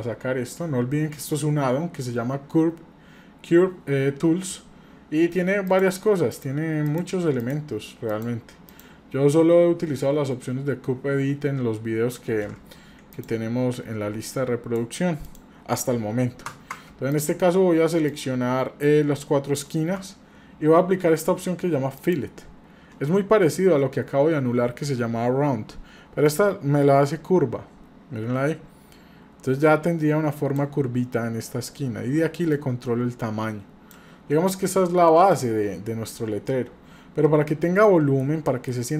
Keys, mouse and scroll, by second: 5.7 click, 6.3 click, 6.9 click, 7.4 click, 8.1 click, 8.7 click, 13.1 shift+click, 14.3 click, 15.2 click, 17.1 shift+click, 18.1 shift+click, 22.0 click, 26.3-30.6 drag, 32.5-33.9 drag, 34.6-36.5 middle drag, 37.2-37.6 scroll up 2, 37.9 middle click, 38.4 shift+middle click.